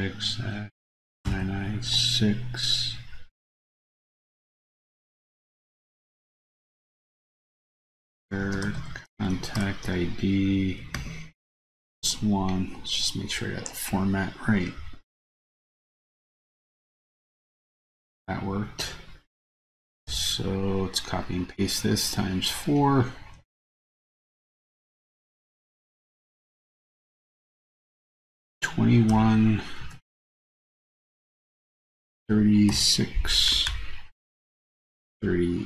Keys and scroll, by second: 23.7 super+c, 25.4 super+v, 26.3 super+v.